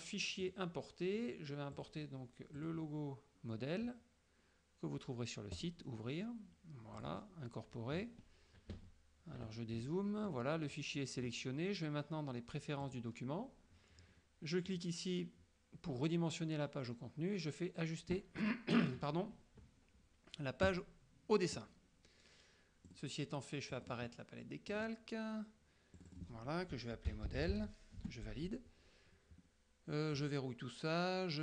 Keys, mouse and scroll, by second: 0.5 click, 1.8 click, 2.7 click, 5.7 click, 7.0 click, 8.8 KP_Subtract, 9.7 KP_Subtract, 10.4 click, 13.0 click, 14.8 click, 20.8 click, 23.0 click, 23.9 click, 24.8 click, 26.0 click, 26.9-28.1 typing, 30.2 click.